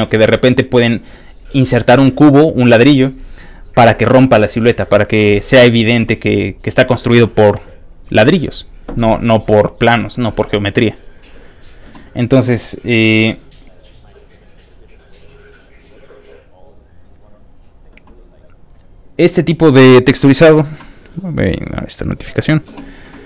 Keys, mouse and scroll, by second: 5.5 scroll down 1, 5.6 scroll up 2, 6.2-6.6 scroll up 2, 8.9 middle click, 11.2 click, 12.6 click, 13.9 click, 14.5 click, 15.5 click, 16.2 click, 16.7 click, 17.3 click, 18.4 click, 19.0 click, 19.4 click, 22.1 click.